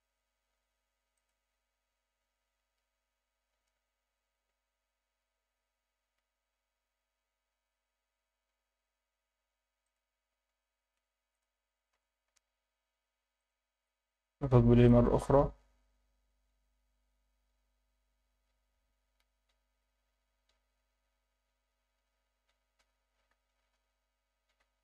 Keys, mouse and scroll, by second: 1.2-1.9 drag, 5.9-7.4 scroll up 5, 8.2-9.0 scroll down 6, 9.8 click, 11.3 click, 11.9 r, 12.3 x, 13.4 click, 14.9 click, 22.4 Escape, 23.3 KP_3, 24.6 r.